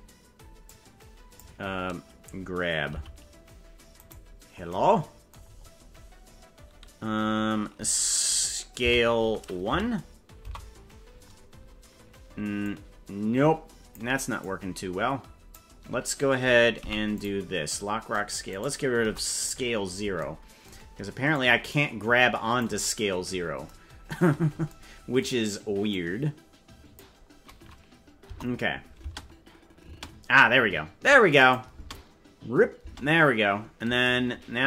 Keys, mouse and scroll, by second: 0.6 click, 2.9 g, 5.5-5.9 scroll up 4, 6.5-6.9 scroll up 2, 8.9 s, 12.6-13.9 drag, 14.4-15.5 drag, 16.8 i, 18.4 right click, 19.0 Delete, 21.2-22.6 drag, 25.8-26.9 drag, 28.2 KP_0, 29.0 space, 29.8 space, 31.3 click, 31.8 space, 32.8 space.